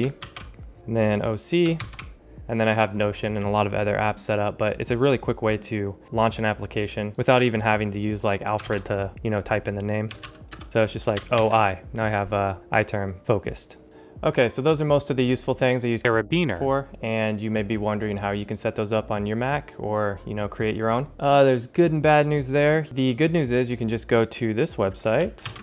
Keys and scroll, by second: 8.5 ctrl+alt+shift+super+space, 10.0 super+c, 10.4 Return.